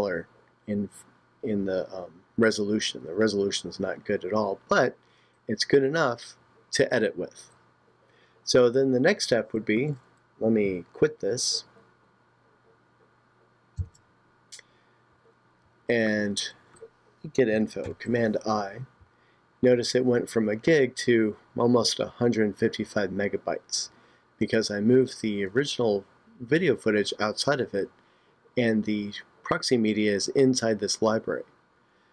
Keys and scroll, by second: 13.8 super+q, 17.8 super+i.